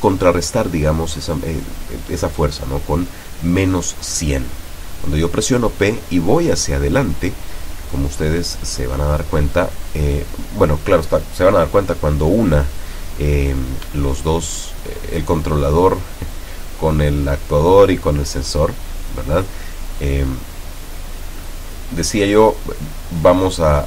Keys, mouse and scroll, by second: 0.2-1.2 drag, 2.1 click, 4.3 click, 5.6-6.5 drag, 7.0 click, 8.0 KP_Subtract, 8.3 KP_1, 8.5 KP_0, 8.7 KP_Enter, 11.6 p, 16.4 Up, 20.6 Escape, 22.6-23.8 drag.